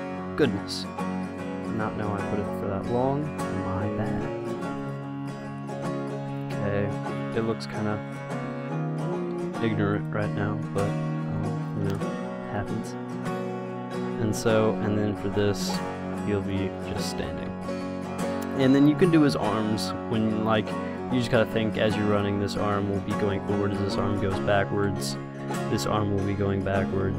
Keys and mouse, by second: 2.0 middle click, 2.9-3.9 drag, 3.1 r, 4.6 i, 5.0-6.2 drag, 5.6 r, 6.7 i, 8.2 r, 9.0 click, 9.6 i, 10.2-11.6 drag, 11.1 r, 12.1 i, 13.6-15.5 drag, 14.3 r, 15.4 i, 16.0-17.7 drag, 16.3 r, 17.7 i, 18.5-20.5 drag, 22.4-24.2 drag, 22.6 r, 24.7 i, 25.7-27.1 drag, 26.0 r.